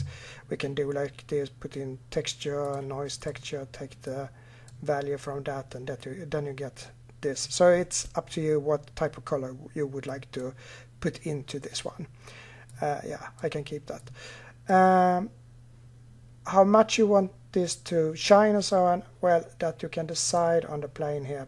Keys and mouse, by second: 3.8-15.8 drag, 20.1-21.4 drag.